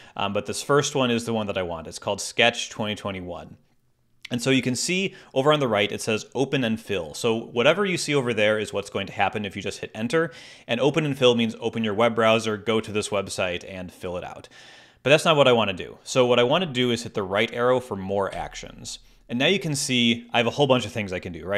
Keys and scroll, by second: 18.3 Right.